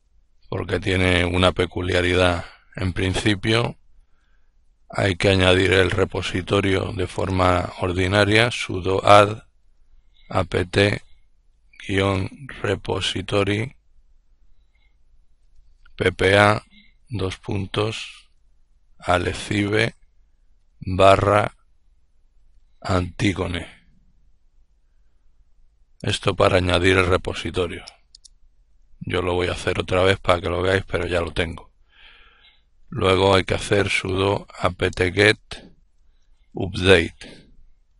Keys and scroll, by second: 3.6-20.3 typing, 22.0-26.1 typing, 27.4-28.1 typing, 32.3-37.9 typing.